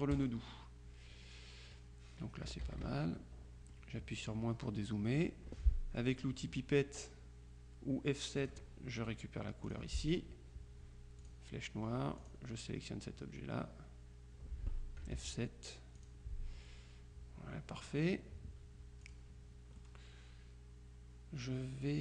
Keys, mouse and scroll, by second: 0.2 click, 2.7 KP_Subtract, 3.8-4.9 drag, 8.5 click, 9.7 click, 11.3 click, 12.3 click, 15.1 F7, 16.1 click, 17.8 middle click, 19.1 click, 19.9-22.0 drag.